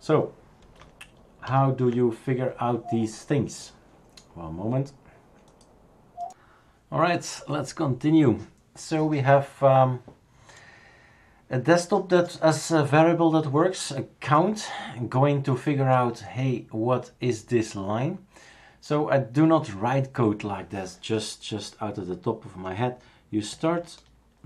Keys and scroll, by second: 1.5 ctrl+a.